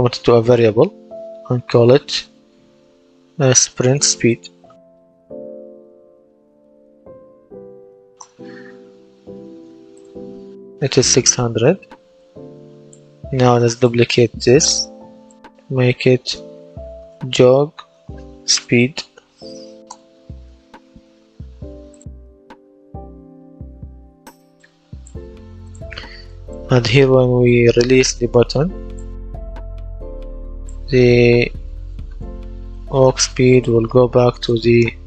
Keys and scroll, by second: 3.8-7.9 typing, 8.0 Return, 16.6-19.7 typing, 19.7 Return, 31.9 ctrl+d.